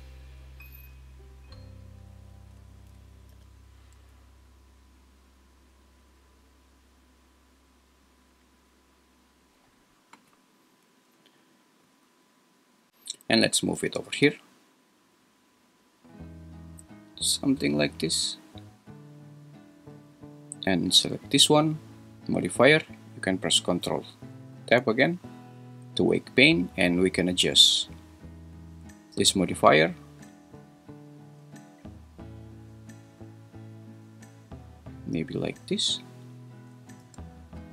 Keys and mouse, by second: 3.3 g, 4.0 z, 10.8 Escape, 13.7 g, 14.1 z, 24.5 ctrl+Tab, 28.6 click, 30.4-35.0 shift+drag, 36.1 click, 37.0 ctrl+Tab.